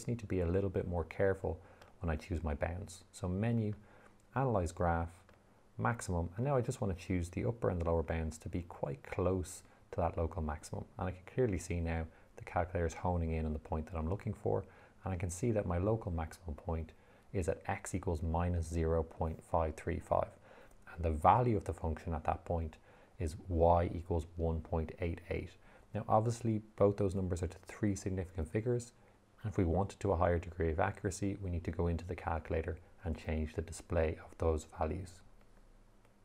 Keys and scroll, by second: 2.2 Menu, 4.1 6, 5.6 3.